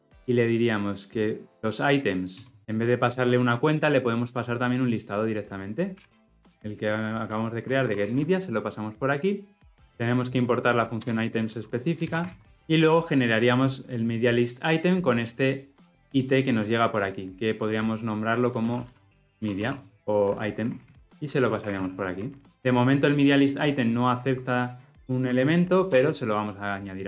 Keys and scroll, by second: 7.3 Return, 8.0 ctrl+alt+l, 12.1 ctrl+alt+l, 12.2 ctrl+alt+o, 22.5 ctrl+alt+o, 26.0 alt+Return.